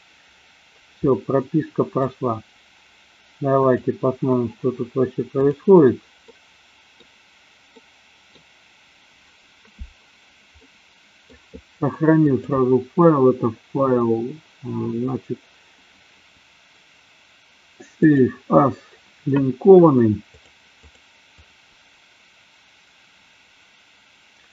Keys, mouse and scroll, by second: 1.0-2.0 middle drag, 4.0-9.5 drag, 10.6 middle click, 12.1-18.5 drag.